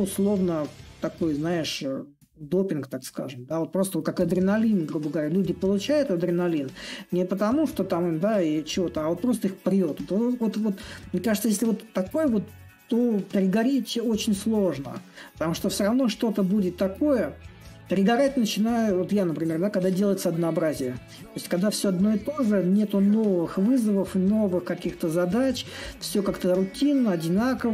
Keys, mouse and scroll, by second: 0.0-5.0 drag, 7.7-12.7 drag, 15.4-20.4 drag, 22.7-27.7 drag.